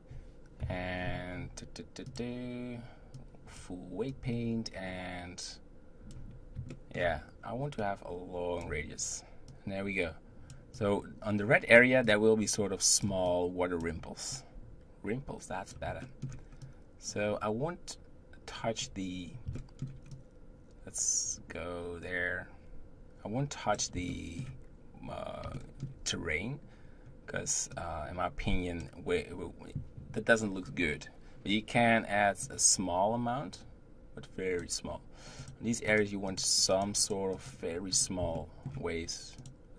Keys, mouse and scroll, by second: 0.6 KP_7, 2.1 click, 3.1-6.7 drag, 6.7-7.8 shift+middle drag, 7.8-16.0 drag, 16.0 shift+middle click, 16.7-19.5 drag, 19.5 shift+middle click, 20.2-23.2 drag, 24.5-26.8 shift+middle drag, 26.8-27.8 scroll up 1, 27.8-30.7 drag, 32.4-38.3 drag, 38.3-39.4 shift+middle drag, 39.4 click.